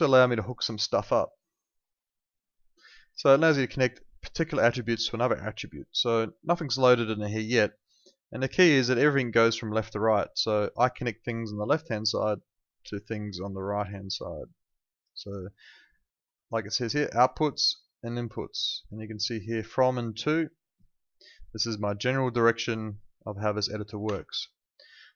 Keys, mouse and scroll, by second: 0.8 alt+middle click, 2.6 click, 10.4 ctrl+2, 24.0 Escape.